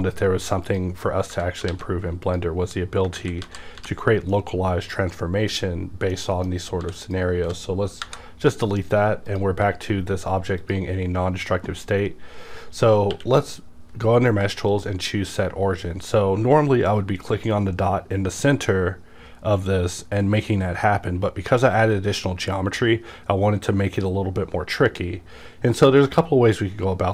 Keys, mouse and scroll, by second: 0.6 click, 1.7 alt+x, 2.2 click, 3.1 ctrl+z, 4.3-7.0 middle drag, 6.8 x, 7.0 click, 8.8-9.3 scroll down 1, 9.3 click, 10.6 click, 11.9-12.3 scroll up 1, 13.1 q, 14.7 click.